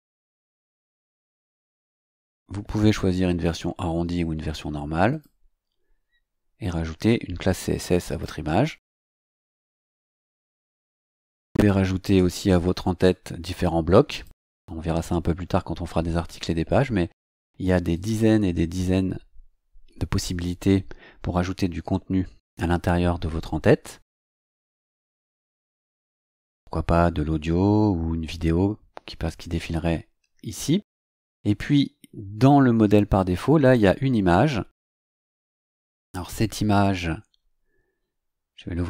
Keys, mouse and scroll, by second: 5.1 click, 6.0-6.3 scroll down 2, 8.0 click, 14.1 click, 17.9 click, 28.0 scroll down 2, 30.8-31.1 scroll down 2, 31.5 scroll down 2, 33.6 click, 35.8 right click, 38.7 click.